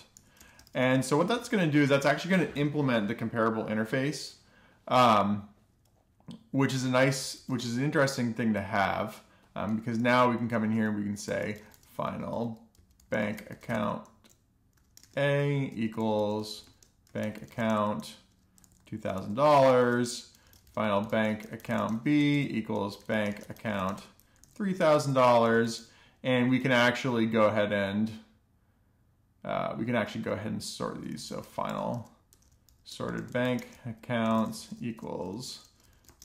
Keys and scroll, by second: 0.4 Right, 0.7 ;, 0.9 alt+shift+f, 1.4 alt+shift+f, 1.7 super+s, 7.6 alt+shift+f, 9.9 Return, 10.2-25.4 typing, 20.2 Return, 25.6 alt+shift+f, 25.9 Return, 26.4 typing, 26.5 Return, 31.0-36.2 typing.